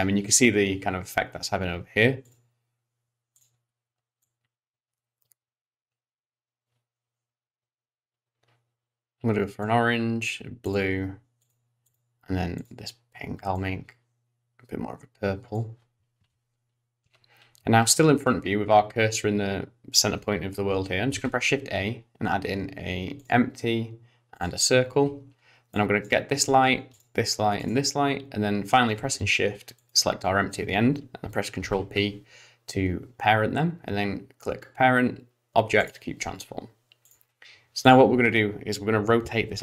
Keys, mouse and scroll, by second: 2.2 click, 3.3 click, 10.6 click, 11.4 click, 11.8 click, 12.6 click, 16.8-18.0 scroll down 1, 18.0-19.6 scroll up 1, 21.1 shift+a, 25.7 click, 26.9 shift+click, 27.6 shift+click, 29.8 shift+click, 31.6 ctrl+p, 37.1 click, 37.8 click, 39.5 r.